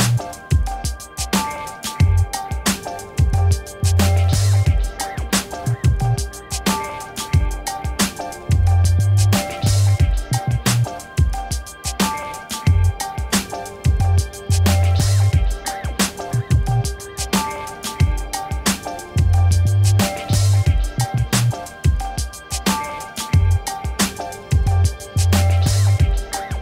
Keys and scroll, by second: 7.8 ctrl+-, 11.1 ctrl++.